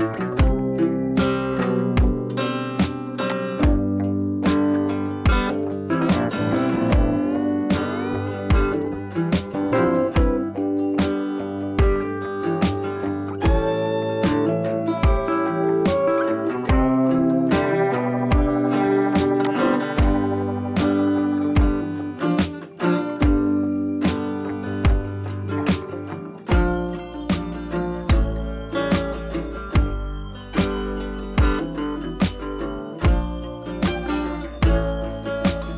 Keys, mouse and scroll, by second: 12.0 scroll up 1, 18.5 shift+right click, 19.4 click, 20.1-21.5 scroll down 1, 24.7 click, 25.4-26.6 scroll down 1, 26.8 click, 27.8 ctrl+c, 28.3-29.7 scroll up 1, 29.7 click, 32.4 ctrl+v, 33.3-34.8 drag.